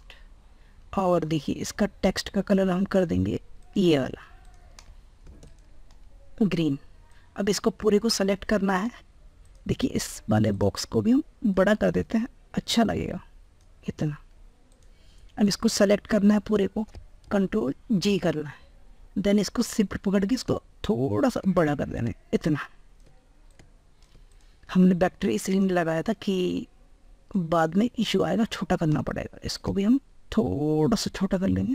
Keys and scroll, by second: 17.9 ctrl+g.